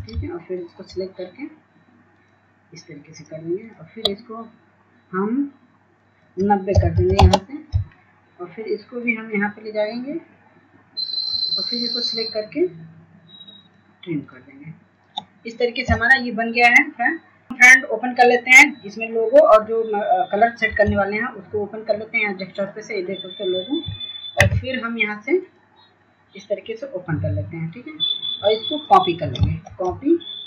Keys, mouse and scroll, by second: 0.5 ctrl+space, 1.3-12.1 shift+drag, 16.7 Delete, 23.4 click.